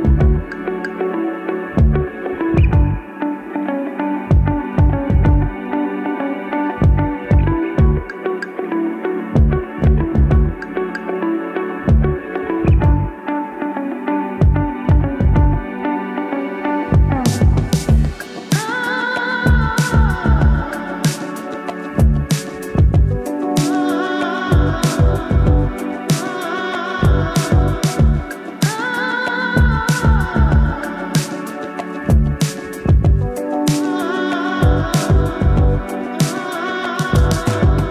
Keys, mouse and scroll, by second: 0.5 right click, 2.3 click, 4.3-5.5 typing, 5.8 Return, 7.4-11.1 drag, 16.5 shift+c, 17.0-19.4 drag, 26.5-27.3 scroll up 2, 27.3-28.1 scroll up 1, 28.1-28.8 scroll up 1, 28.8-30.7 drag, 30.8-31.7 scroll up 1, 32.3 click, 36.4 Return.